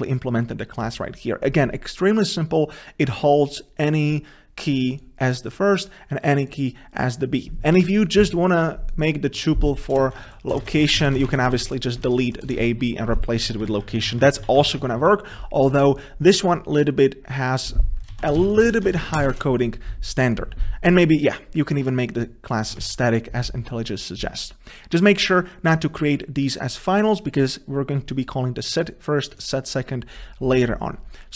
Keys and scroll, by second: 8.6 alt+Return, 11.6 ctrl+shift+Left, 11.7 ctrl+c, 13.6 ctrl+z, 14.2 ctrl+z, 14.8 ctrl+z, 19.2 ctrl+z, 23.0 ctrl+s.